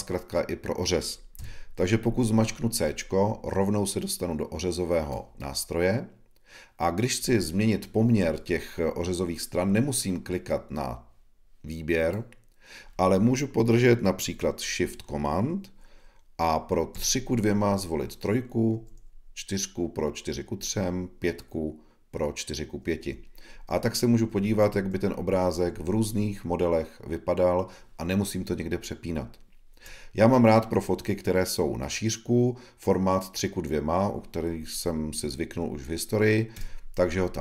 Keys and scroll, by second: 16.9 shift+super+3, 18.7 shift+super+4, 20.5 shift+super+5, 23.0 shift+super+4, 23.5 shift+super+3, 24.2 shift+super+4, 24.7 shift+super+5, 25.2 shift+super+3, 25.7 shift+super+4, 26.1 shift+super+5, 26.4 shift+super+3.